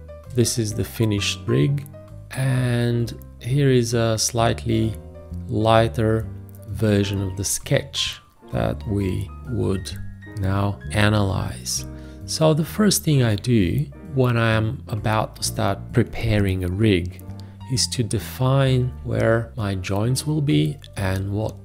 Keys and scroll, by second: 18.9 b.